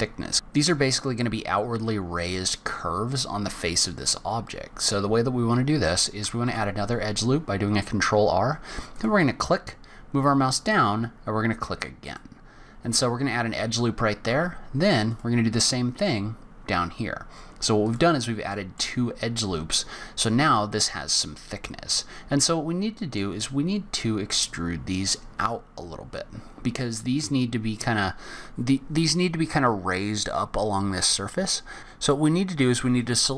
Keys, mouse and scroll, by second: 3.1-4.3 scroll down 3, 6.4 ctrl+r, 14.3 ctrl+r, 18.5 middle click, 19.2-20.0 scroll down 2, 20.0 scroll down 1, 21.5-22.4 scroll up 1, 22.4 middle click, 23.8-25.5 scroll up 3, 26.0-26.8 scroll down 6, 26.8 middle click, 31.1-31.8 scroll up 4.